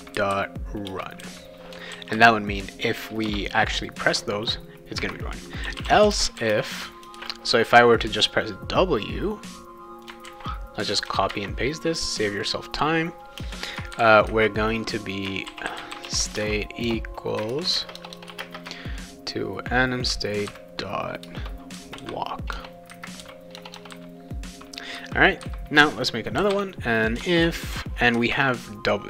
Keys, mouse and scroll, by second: 0.9 Return, 1.2 ;, 1.9 ctrl+s, 3.2 Return, 5.4-7.6 typing, 9.0-10.0 drag, 10.2 ctrl+c, 10.9 click, 11.3 ctrl+v, 12.3 click, 13.4 space, 14.0 shift+[, 15.2-18.4 typing, 21.2 Return, 22.0-23.9 typing, 26.1-29.0 typing, 27.2 Return.